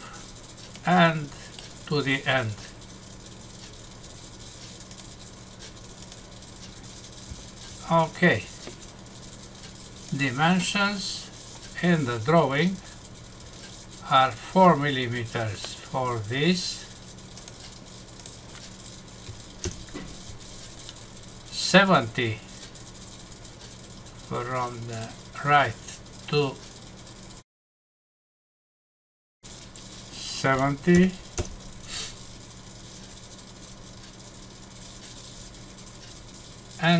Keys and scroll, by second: 19.6 Return, 20.8 Num_Lock, 31.4 Return.